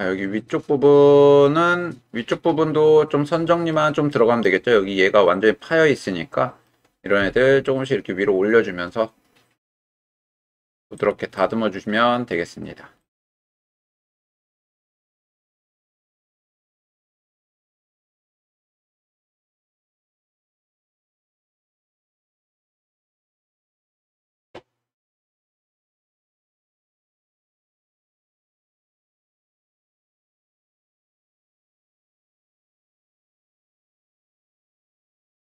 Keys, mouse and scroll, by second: 4.3 shift+middle click, 5.4 click, 6.0 middle click, 7.2 g, 10.2 click, 11.0 click, 11.3 middle click, 13.0 middle click, 14.9 g, 18.2 click, 18.8 middle click, 20.1 shift+middle click, 20.7-21.8 middle drag, 22.1 g, 25.6 click, 26.1-32.6 middle drag, 32.8 g, 35.2 click.